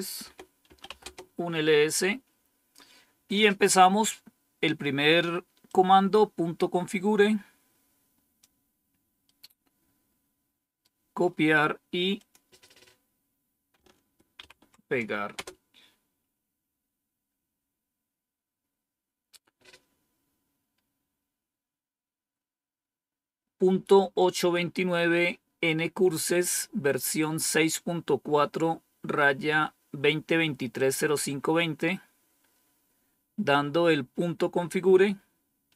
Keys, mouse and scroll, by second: 0.0-1.3 typing, 3.3-4.1 typing, 5.6-8.3 drag, 9.1-10.7 right drag, 12.1 click, 14.3 ctrl+v, 15.2 Return.